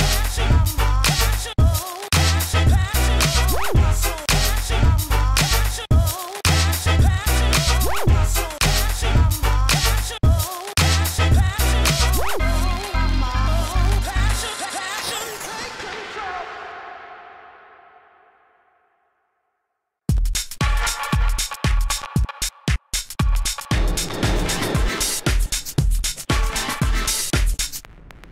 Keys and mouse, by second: 1.1 ctrl+z, 1.2 shift+f, 4.3 f, 5.0 shift+f, 7.3 s, 11.2 s, 15.5 ctrl+s, 17.2 alt+s, 18.4-20.8 typing, 22.8 s, 23.0 f, 23.6 f, 24.6 ctrl+z, 24.9 s, 26.2 s, 28.0 f.